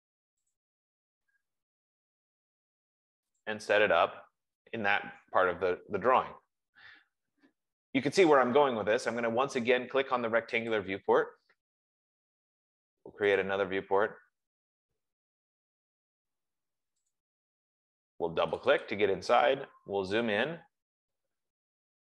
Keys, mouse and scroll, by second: 0.0-1.4 typing, 1.0 click, 2.6 F15, 2.9-4.7 typing, 3.8 click, 7.2 Escape, 11.1 click, 13.7 click, 17.4 click, 19.0 click, 19.1 click, 20.0-20.9 scroll, 21.1-21.9 scroll.